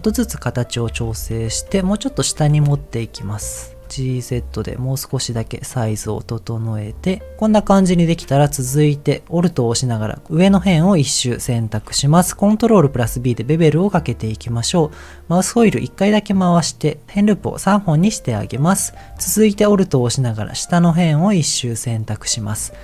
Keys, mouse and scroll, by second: 0.0 s, 0.4 click, 0.7 middle click, 1.4 Tab, 1.8 middle click, 2.3 g, 2.5 z, 3.8 g, 3.8 z, 4.9 click, 5.3 s, 5.7 click, 5.9 middle click, 7.1 middle click, 8.6 alt+click, 10.0 middle click, 11.3 middle click, 12.8 ctrl+b, 15.4-16.4 scroll up 1, 18.6 middle click, 19.1 alt+click, 19.7 middle click, 22.0 click, 22.4 middle click.